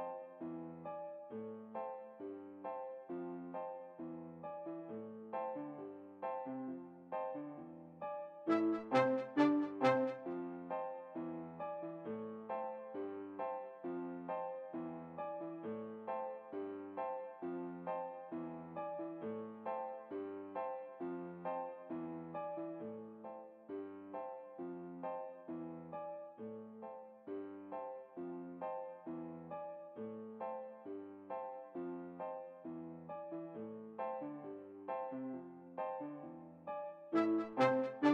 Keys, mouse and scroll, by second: 1.5-3.6 middle drag, 3.4 alt+a, 5.6-6.8 middle drag, 8.5 middle click, 12.3 Escape, 15.2 middle click, 15.6-17.0 right drag, 17.1 right click, 17.5 v, 20.7-22.3 right drag, 21.3 v, 26.2 v, 28.1-29.5 right drag, 29.2-31.1 middle drag, 31.0 r, 33.2-34.6 right drag, 34.0 g, 37.5-38.1 middle drag.